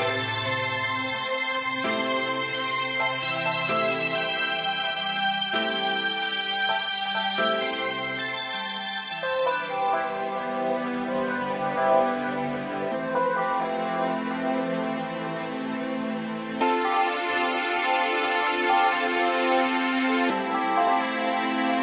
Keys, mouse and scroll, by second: 1.1 click, 4.5 click, 7.5 click, 9.5 middle click.